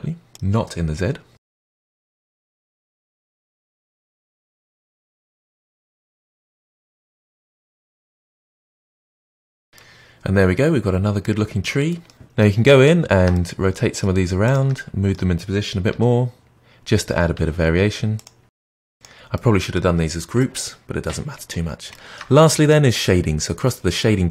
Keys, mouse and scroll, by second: 0.5 alt+d, 0.6-7.7 typing, 1.2 middle click, 1.6 middle click, 1.8 alt+d, 2.3 alt+d, 3.0 alt+d, 3.6 alt+d, 4.3 alt+d, 4.5 alt+d, 4.9 alt+d, 5.4 alt+d, 5.8 middle click, 6.6 alt+d, 7.1 alt+d, 7.5 alt+d, 7.9 alt+d, 8.1 alt+d, 8.3 middle drag, 8.5 click, 8.5-8.9 middle drag, 8.9 shift+click, 9.0 shift+click, 9.1 middle click, 9.2 g, 9.4 middle click, 9.5 scroll down 4, 9.6-11.8 middle drag, 11.8 scroll up 5, 12.1-14.4 middle drag, 14.4 shift+click, 14.7-15.8 middle drag, 15.8 g, 16.9-17.7 middle drag, 17.7 g, 18.4 r, 19.3 middle click, 19.9-20.3 scroll down 2, 20.3-21.5 middle drag, 21.5-21.9 scroll down 1, 21.9-24.3 shift+middle drag.